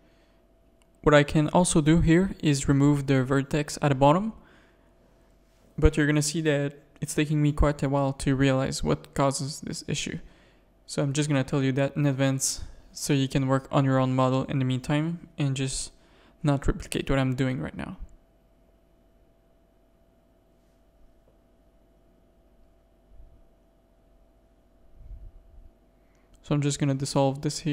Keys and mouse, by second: 0.4 x, 1.0 a, 1.5-2.6 middle drag, 3.0 middle click, 4.4-7.8 typing, 5.1 ctrl+r, 6.8 ctrl+r, 8.6 click, 9.5 shift+click, 10.1 f, 10.5 a, 10.9 ctrl+r, 11.3 g, 12.5-14.5 typing, 15.5-16.6 middle drag, 17.3 /, 18.7 KP_3, 19.5 shift+middle click, 19.9 middle click, 20.6 z, 20.8 middle click, 21.9 z, 22.2 middle click, 23.1 middle click, 23.5 middle click, 25.6 x, 26.6 z, 27.6 middle click.